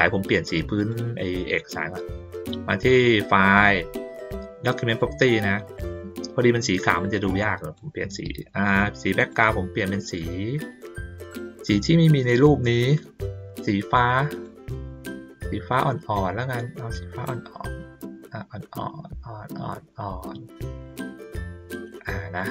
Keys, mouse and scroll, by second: 0.8 click, 4.9 click, 7.3-7.7 drag, 9.2 click, 13.5 click, 14.7-21.0 drag.